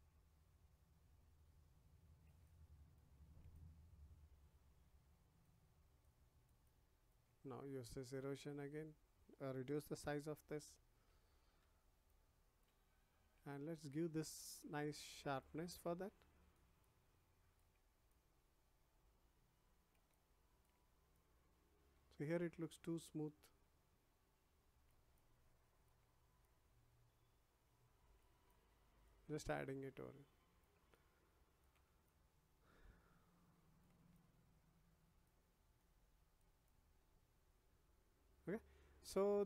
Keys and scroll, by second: 9.8 [.